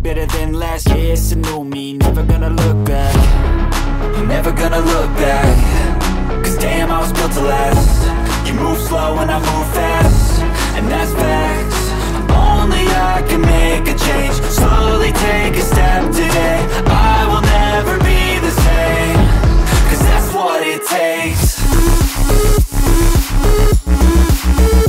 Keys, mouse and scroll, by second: 0.8 click, 1.7 shift+middle click, 2.0 middle click, 5.1 click, 5.5-7.1 drag, 7.8 click, 11.4 middle click, 11.7 click, 12.4 KP_7, 12.7 click, 13.4 g, 13.9 click, 14.3 middle click, 14.6 KP_1, 14.8 shift+middle drag, 15.1-15.6 drag, 15.7 middle drag, 16.1 middle click, 17.2 click, 18.0 g, 19.8-21.6 drag, 22.2 click, 22.4 KP_7, 22.7 shift+middle click, 22.9 shift+c, 23.5 shift+a.